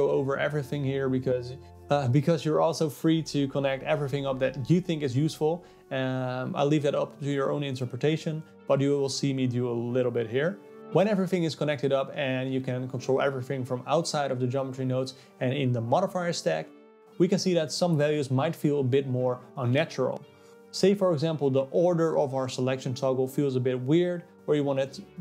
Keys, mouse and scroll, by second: 0.9-1.7 scroll up 2, 1.7-2.3 scroll down 2, 2.3 middle click, 2.9-4.6 scroll up 6, 4.6 click, 5.8-6.3 scroll down 4, 6.3 middle click, 7.2 scroll down 2, 7.5-9.0 middle drag, 9.0 click, 11.8 click, 13.7 click, 15.5 middle click, 15.8 click, 17.0 click, 17.1 middle click, 17.8 click, 18.8 click, 19.7 click, 20.9 click, 22.7 click, 24.8 click.